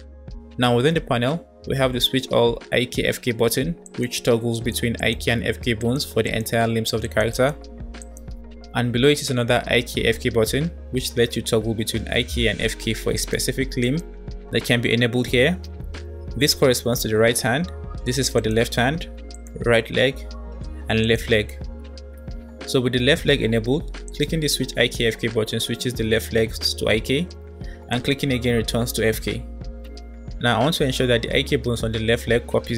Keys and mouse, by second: 4.0 click, 4.5 click, 5.0 click, 5.7 click, 6.2 click, 6.6 click, 7.1 click, 7.8 click, 13.2 click, 13.9 click, 18.2 click, 19.3 click, 21.1 click, 24.1 click, 28.0 click.